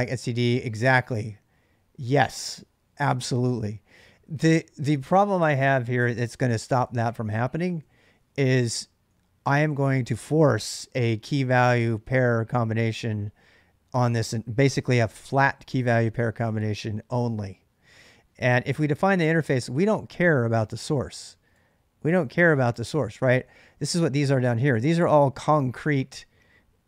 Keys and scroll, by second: 6.5 ctrl+[, 6.7-7.6 j, 7.7 j, 8.7 j, 9.2-10.0 k, 18.5 ctrl+[, 18.7 k, 18.8 k, 19.1 k, 19.3 k, 21.3-25.2 typing.